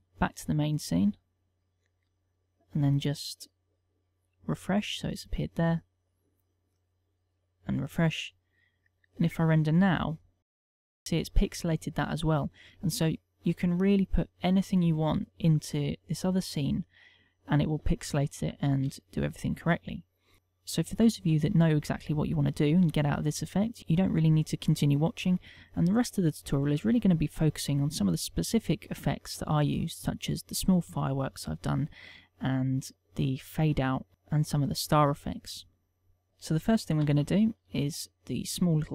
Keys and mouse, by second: 1.9 middle click, 3.2 middle click, 4.3 click, 5.7 middle click, 6.5 click, 7.0 middle click, 7.9 click, 10.4 F12, 16.0 click, 17.8 click, 19.0 Delete, 37.6 KP_1, 38.4 shift+middle click, 38.7 ctrl+middle click.